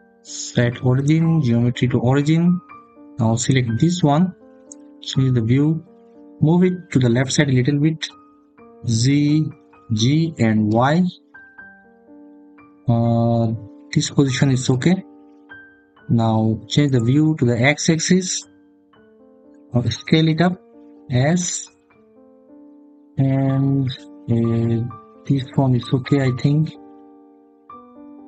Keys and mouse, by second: 4.5 click, 8.2 g, 10.5 y, 14.4 click, 20.3 s, 25.2 click.